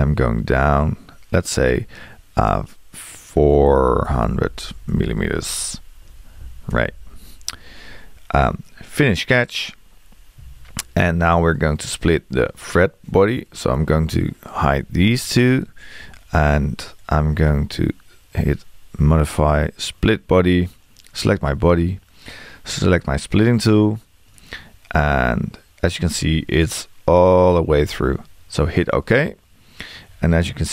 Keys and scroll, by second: 3.6 4.